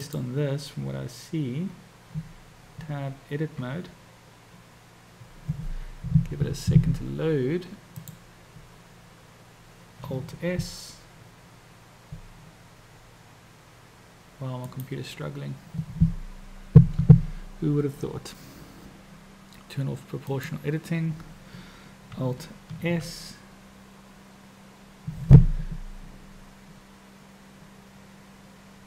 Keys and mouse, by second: 0.1 click, 2.8 Tab, 8.1 click, 12.7 alt+s, 20.3 click, 22.8 alt+s.